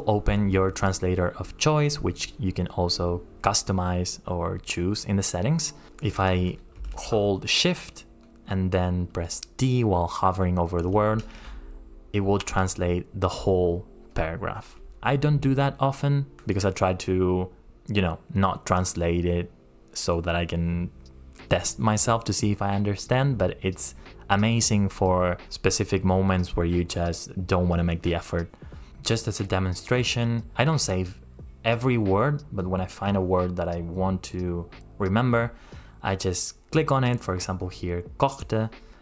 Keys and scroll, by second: 7.6 shift+t.